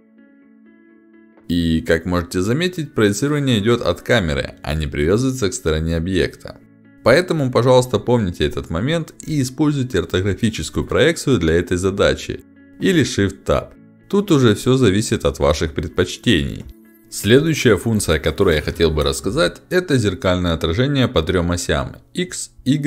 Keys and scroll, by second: 2.0 space, 3.6 ctrl+z, 8.1 5, 12.3 space, 14.1 space, 16.8 5, 16.8 ctrl+alt+x, 17.8 h, 20.0 ctrl+alt+d.